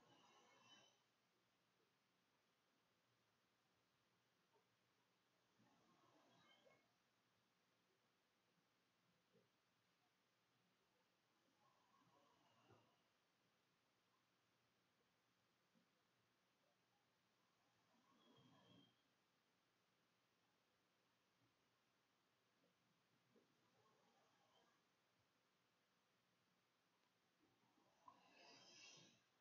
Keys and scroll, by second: 1.9-18.1 typing, 22.0 Escape, 22.1 Tab, 24.5-26.5 typing, 29.0 ;, 29.1 [.